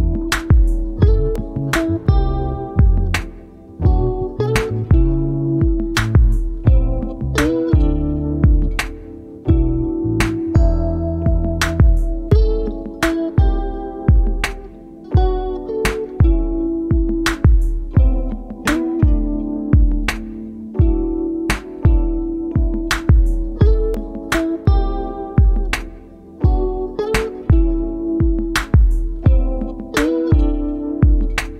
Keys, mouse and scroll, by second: 1.1-1.7 ctrl+scroll up 4, 2.9 click, 5.2 click, 6.2 click, 7.4 space, 8.3-11.3 drag, 12.1-13.4 ctrl+shift+drag, 14.1 click, 15.3 ctrl+d, 15.9 click, 16.9-22.5 ctrl+drag, 23.0 shift+click, 24.5 ctrl+g, 25.3 typing, 25.5 shift+click, 26.9 click, 27.7 click, 29.2 click, 30.1 click, 30.9 click.